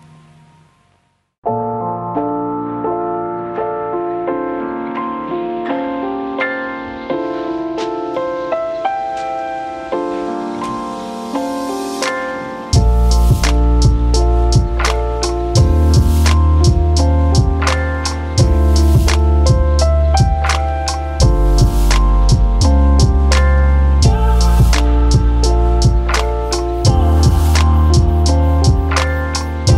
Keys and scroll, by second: 8.6 Return, 10.2 Return, 11.4 Return, 13.0 Return, 16.3-18.8 typing, 22.3 ctrl+d, 24.7-25.5 typing.